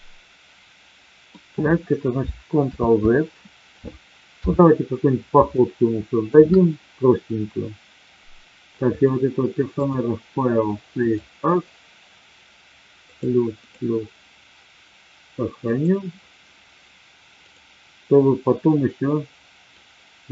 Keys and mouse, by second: 2.8 ctrl+z, 4.3 KP_3, 5.6-6.2 shift+middle drag, 10.0-11.3 drag, 17.4-18.2 drag, 19.8-20.3 drag.